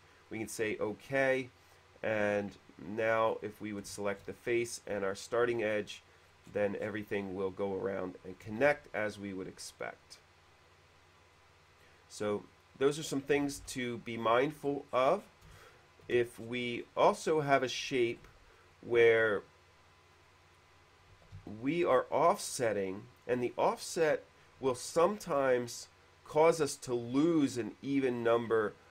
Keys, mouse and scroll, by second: 0.4 click, 3.5 click, 4.1 shift+click, 5.4 click, 6.4 middle click, 6.6 scroll up 1, 6.9-8.2 middle drag, 8.8 shift+e, 9.2 click, 9.9 click, 11.5 click, 12.5 click, 12.6 click, 13.8 ctrl+z, 14.4 ctrl+z, 14.4 middle click, 14.6-15.0 scroll down 1, 15.4 scroll down 1, 15.6-16.0 scroll up 1, 15.8 shift+middle click, 16.6 middle click, 17.0 middle click, 18.4 ctrl+z, 18.4 a, 18.7 click, 20.4 click, 21.1-22.0 typing, 22.0 click, 23.0 click, 23.6-24.8 typing, 25.8 click, 26.6 click.